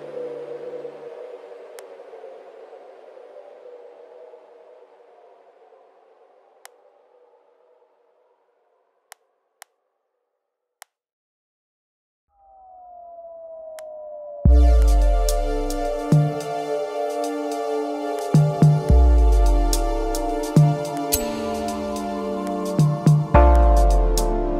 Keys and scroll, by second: 4.3 super+i.